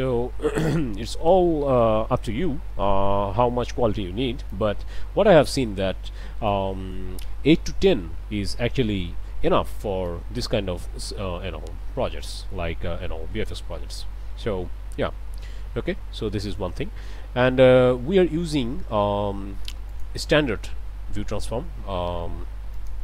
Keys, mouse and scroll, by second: 0.0 click, 1.3-4.7 drag, 6.5 click, 7.6 8, 8.0 Return, 10.1-13.7 drag, 17.0 scroll down 2, 19.9 click, 22.8 click.